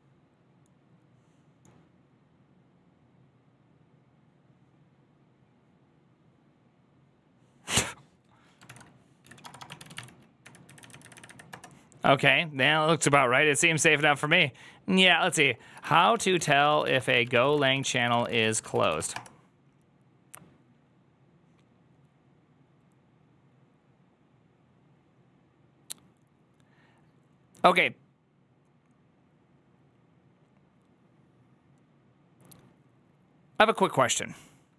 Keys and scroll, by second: 9.3-10.3 typing, 10.5 Down, 10.7 Down, 10.8 Down, 11.4 Down, 11.4 Return, 16.3-19.3 typing.